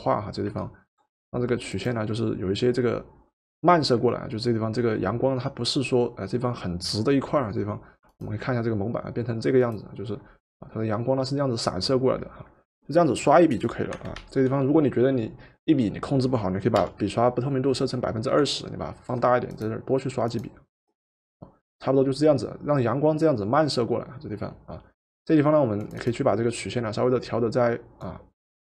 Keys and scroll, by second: 14.2 ctrl+z, 16.7 2.